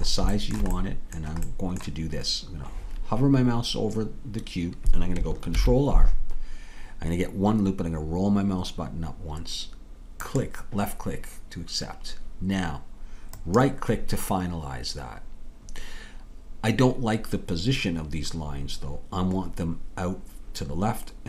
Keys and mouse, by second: 5.5 ctrl+r.